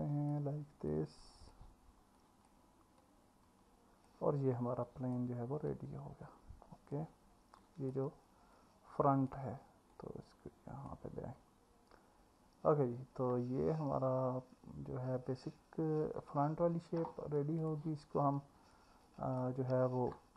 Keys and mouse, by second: 0.0 click, 0.9 click, 2.3 click, 4.8 click, 5.7 click, 7.7 click, 16.1 Tab, 18.7-19.4 middle drag.